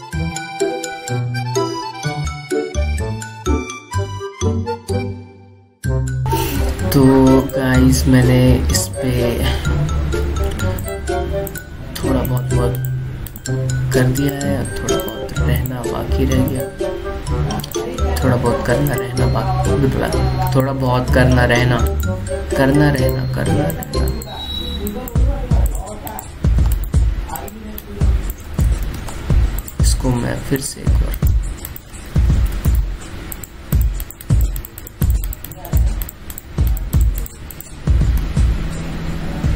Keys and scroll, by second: 4.1 ctrl+t, 29.6 ctrl+z, 33.1 ctrl+z, 33.3 ctrl+z.